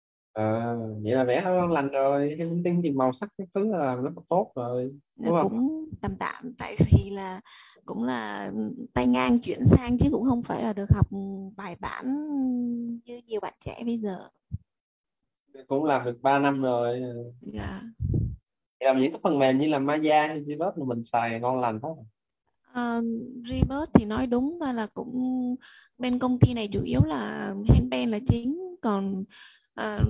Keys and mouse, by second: 24.4 click, 29.4-30.0 typing.